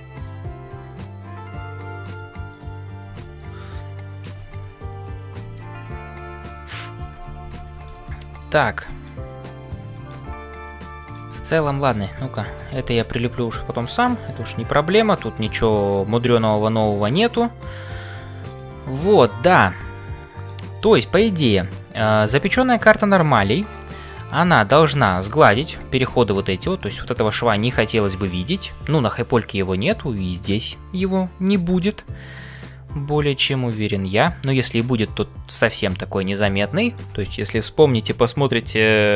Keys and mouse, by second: 0.7-2.1 middle drag, 3.0 g, 7.7 middle click, 8.0-9.2 middle drag, 9.9 shift+middle click, 10.6 middle click, 11.7 Tab, 12.2 shift+middle click, 12.9 ctrl+s, 13.4-17.7 middle drag, 17.7 c, 18.3 shift+middle click, 19.2-20.6 middle drag, 22.1 shift+middle click, 22.6-23.7 middle drag, 27.0 shift+middle click, 30.6-34.4 middle drag, 35.7 shift+middle click, 36.2 middle click.